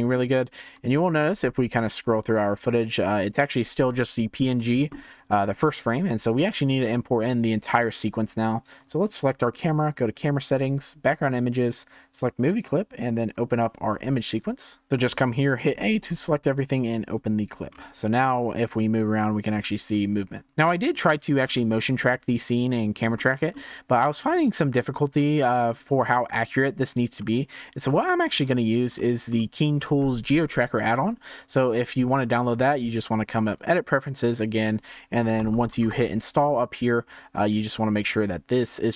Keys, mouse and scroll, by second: 0.7 Tab, 1.9-4.9 drag, 8.8 click, 10.0 click, 11.0-12.4 drag, 13.3-14.9 drag, 17.6-18.1 scroll down 4, 18.1 scroll up 1, 19.1-20.9 drag, 21.0-21.5 scroll up 1, 21.5-23.8 shift+middle drag, 23.8-24.3 scroll up 1, 24.3-27.1 shift+middle drag, 27.1-27.5 scroll down 2, 27.5-27.9 scroll up 1, 27.9-32.0 shift+middle drag, 32.6-35.7 drag.